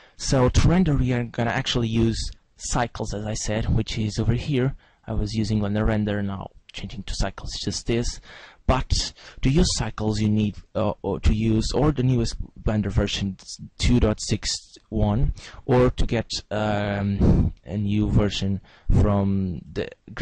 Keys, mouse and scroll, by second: 4.4 click, 5.5 click.